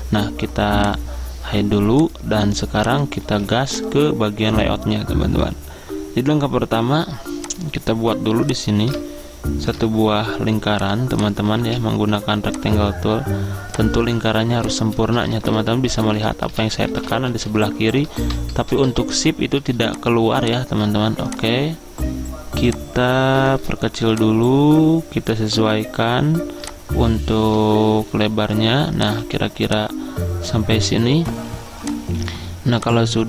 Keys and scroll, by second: 3.4 ctrl+z, 11.7 z, 15.0-17.9 typing, 29.3 z.